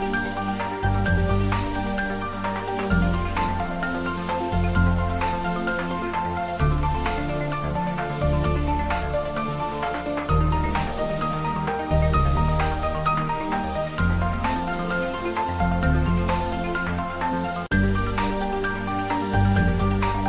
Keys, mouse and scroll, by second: 0.2 ctrl+s, 0.4-3.4 ctrl+middle drag, 3.4 click, 3.9 ctrl+middle click, 4.6 g, 5.4 click, 5.8 click, 6.2 alt+h, 7.3 click, 8.5 middle click, 8.6 middle click, 9.3 middle click, 10.7 click, 12.2 click, 13.0 shift+click, 13.8 click, 14.3 shift+click, 15.2 ctrl+z, 15.5 shift+click, 17.1 ctrl+j, 17.9 shift+click, 19.3 shift+click, 19.9-20.2 ctrl+middle drag.